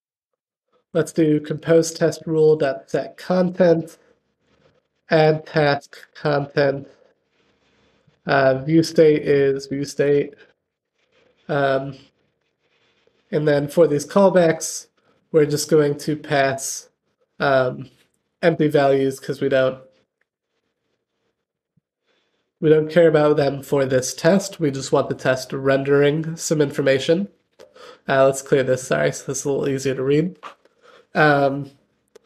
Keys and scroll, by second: 1.8 Return, 5.4 Return, 10.4 super+p, 13.5 Return, 19.9 super+p, 22.2 Return.